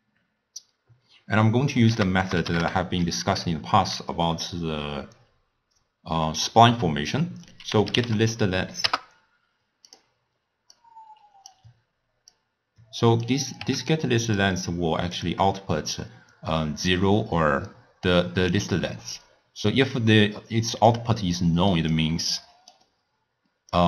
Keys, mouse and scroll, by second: 1.9 ctrl+a, 10.8 drag, 12.4 click, 13.7 w, 15.6-16.1 scroll up 3, 16.1-20.9 middle drag, 20.9 drag, 22.3-23.8 drag.